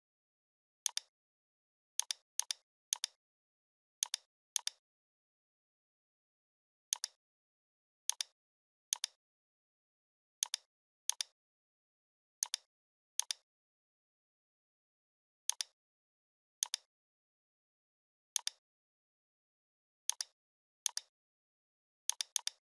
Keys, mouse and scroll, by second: 0.9-1.5 click, 2.8 space, 3.0 click, 3.1-3.6 space, 4.0-5.6 drag, 8.1 click, 8.9-10.2 shift+drag, 10.4-13.8 drag, 16.6-17.3 drag, 18.4-18.8 shift+drag, 20.8 space, 20.9-21.9 click, 21.2 space, 22.2 click.